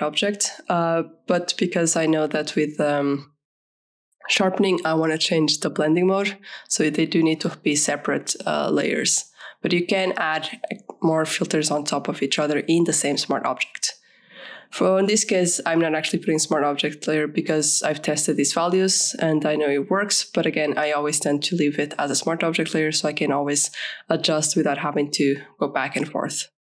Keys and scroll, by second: 3.0 ctrl+a, 3.5 ctrl+shift+c, 3.8 ctrl+shift+v, 7.0-9.3 typing, 18.0 ctrl+=, 23.4 ctrl+a, 24.2 ctrl+shift+c, 24.6 ctrl+shift+v.